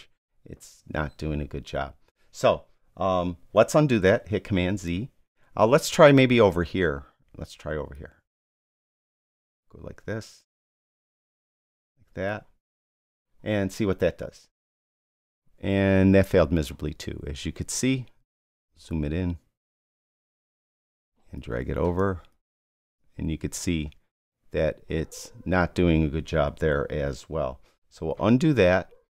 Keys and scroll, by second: 4.3 super+z, 27.9 super+z.